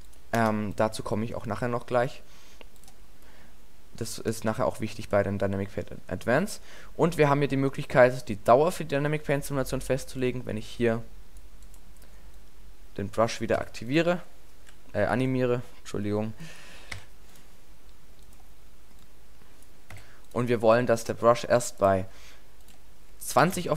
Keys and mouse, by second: 2.8-4.6 drag, 5.0-7.2 drag, 7.6-9.5 drag, 10.2-10.5 drag, 13.6 i, 14.3-14.9 drag, 15.2 ctrl+z, 17.0 i, 20.0 i.